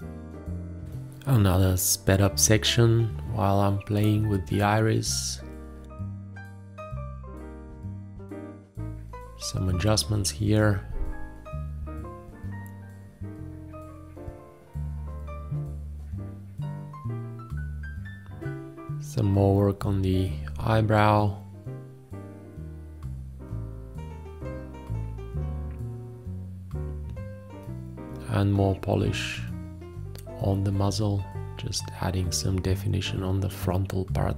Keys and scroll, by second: 0.0 q, 1.3 o, 2.0 q, 4.1 h, 5.9 shift+,, 6.3 space, 7.3 q, 8.5 ctrl+a, 9.2 ctrl+space, 10.2 ctrl+Tab, 10.3 space, 11.0 ctrl+s, 11.3 ctrl+Tab, 11.9 ctrl+Tab, 12.3 ctrl+s, 12.7 ctrl+Tab, 13.8 ctrl+s, 13.9 ctrl+Tab, 14.1 space, 14.4 ctrl+s, 14.5 ctrl+a, 14.7 ctrl+s, 15.1 F9, 15.3 space, 15.6 ctrl+Tab, 15.8 ctrl+s, 16.1 ctrl+Tab, 16.7 F2, 17.2 8, 17.3 F5, 17.7 F3, 18.9 a, 19.3 v, 19.5 ctrl+Tab, 19.7 ctrl+space, 19.9 v, 21.1 ctrl+a, 21.1 ctrl+s, 21.1 ctrl+a, 21.2 space, 21.9 q, 22.7 ctrl+1, 22.7 ctrl+Tab, 22.9 space, 23.1 ctrl+Tab, 24.3 F2, 24.3 ctrl+space, 25.7 d, 26.5 ctrl+a, 26.7 space, 30.5 space, 31.8 ctrl+s, 31.8 ctrl+Tab, 32.0 ctrl+s, 32.3 ctrl+Tab, 33.1 d, 33.4 d, 34.0 f.